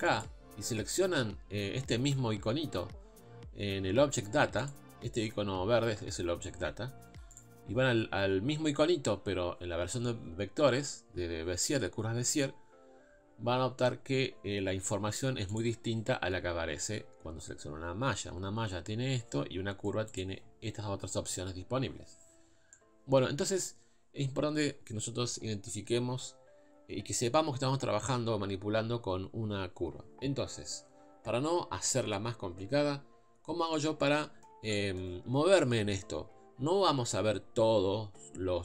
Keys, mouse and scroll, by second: 0.2 click, 4.3 click, 7.4 click, 15.6 click, 20.2 click.